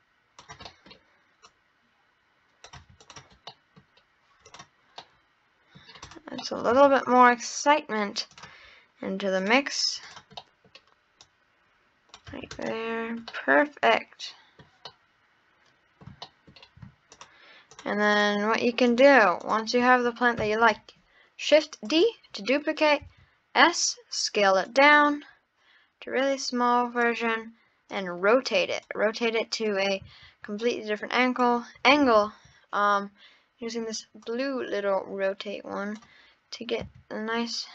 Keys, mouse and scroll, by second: 0.7 middle click, 1.5 click, 3.0 click, 3.5-3.8 middle drag, 3.8-4.5 scroll down 2, 4.5 click, 5.0-6.0 middle drag, 6.0 click, 6.4 middle click, 6.7 Tab, 6.9-7.4 scroll up 1, 8.4-9.6 drag, 10.0 click, 10.4 middle click, 11.2 click, 12.3 Tab, 12.5 click, 13.3-17.1 middle drag, 17.1 shift+click, 17.7 shift+drag, 18.1 shift+click, 18.9 shift+drag, 19.4 shift+click, 20.4 shift+d, 23.0 s, 26.3 click, 27.9-29.0 drag, 30.1 ctrl+z, 30.6 click, 32.1 ctrl+z, 34.2 click, 36.8 s.